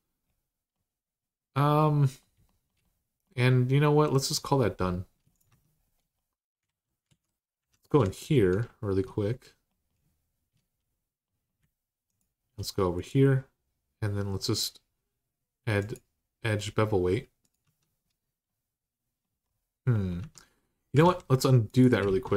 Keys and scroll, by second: 5.3 Tab, 6.4 alt+z, 6.9 alt+z, 7.4 2, 17.4 Tab, 20.0 Tab, 20.8 ctrl+z, 21.4 ctrl+s, 21.8 ctrl+z.